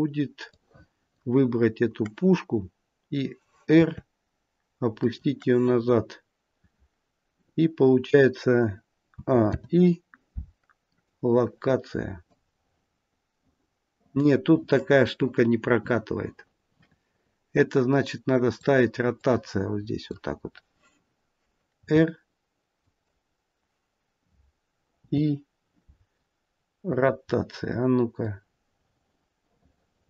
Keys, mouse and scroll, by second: 0.3 click, 3.7 r, 9.0 a, 9.3 i, 12.3 click, 19.1 click, 21.7 r, 24.8 i, 28.2 click.